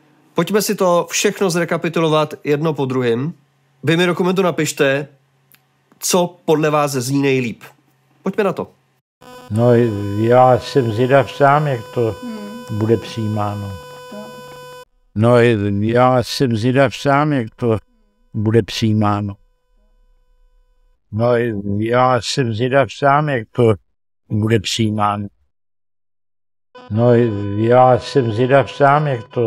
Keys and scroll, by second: 9.0 space, 12.0 Page_Up, 13.7 Page_Up, 13.9 Page_Up, 14.1 Page_Up, 14.4 Page_Up, 14.8 space, 20.9 space.